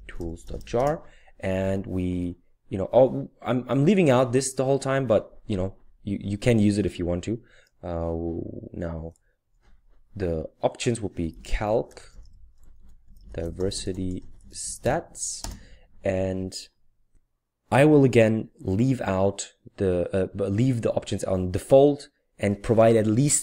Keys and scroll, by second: 0.0-1.2 typing, 11.1-15.3 typing.